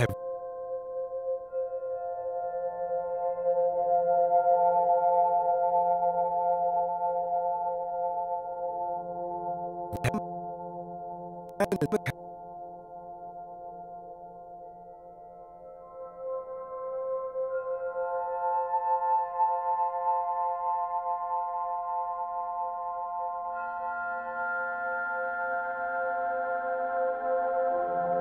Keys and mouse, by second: 0.0 space, 0.9 alt+shift+drag, 1.8 click, 2.0 click, 2.9 click, 3.8 click, 4.3 click, 5.1 click, 6.6 shift+click, 7.9 click, 8.9-12.2 drag, 12.9 click, 13.3 shift+click, 14.0 shift+click, 14.4 shift+click, 15.4 ctrl+s, 16.2-17.3 drag, 17.8-22.5 drag, 21.7-22.8 typing, 23.8-26.4 drag.